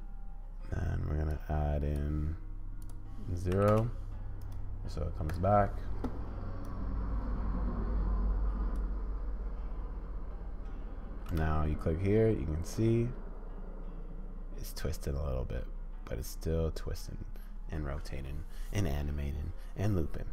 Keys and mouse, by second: 1.3 click, 1.9 middle click, 2.9-4.4 drag, 5.4-6.7 middle drag, 6.7-8.7 drag, 11.3 space.